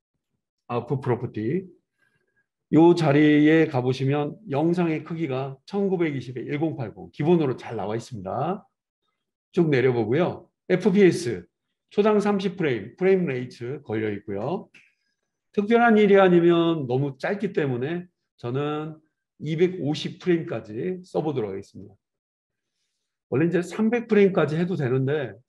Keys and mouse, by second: 1.3-25.4 super+middle drag.